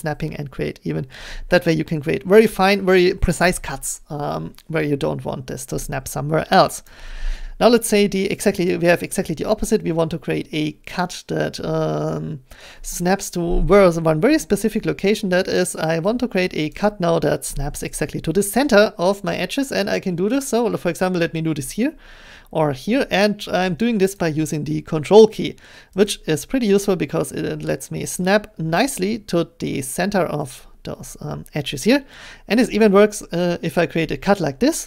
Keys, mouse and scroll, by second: 6.9 shift+click, 8.7 middle click, 16.7 click, 20.4 ctrl+click, 24.2 ctrl+click, 26.1 ctrl+click, 28.2 ctrl+click.